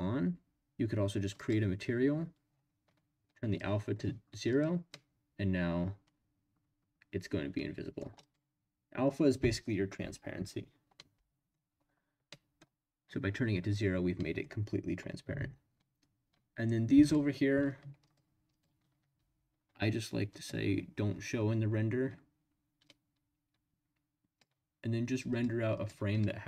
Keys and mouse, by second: 1.3 click, 3.6 click, 4.5 click, 4.9-8.0 middle drag, 8.2 click, 11.1-11.5 middle drag, 12.3-12.6 middle drag, 14.1 click, 14.1 right click, 18.0 shift+click, 18.5 shift+click, 20.4 click, 22.9-24.4 drag, 25.3-26.0 drag.